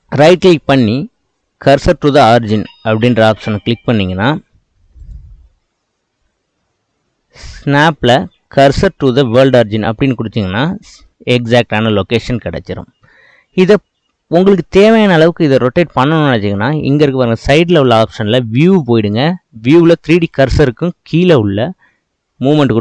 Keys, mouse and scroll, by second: 10.7-12.5 middle drag, 12.5-13.2 scroll up 3, 13.3-16.4 shift+middle drag, 21.9-22.8 drag.